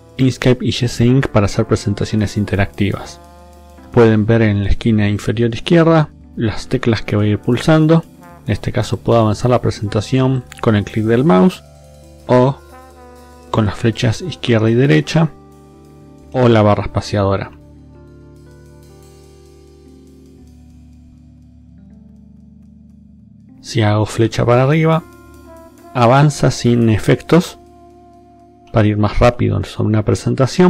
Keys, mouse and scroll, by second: 2.7 click, 6.9 click, 8.9 click, 10.3 click, 11.7 BackSpace, 12.7 Left, 13.9 Left, 14.5 Right, 14.9 Left, 15.6 space, 16.3 space, 17.5 space, 18.9 space, 19.6 space, 20.4 space, 21.8 space, 24.2 Up, 27.8 Up, 28.6 Up, 29.3 Up.